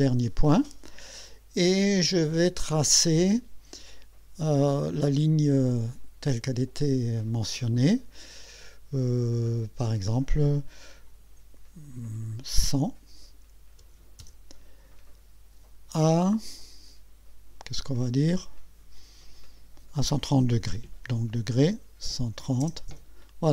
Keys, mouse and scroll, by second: 12.8 KP_1, 13.8 KP_0, 14.8 Return, 21.7 BackSpace, 22.1 KP_1, 22.6 KP_0, 22.9 KP_Enter.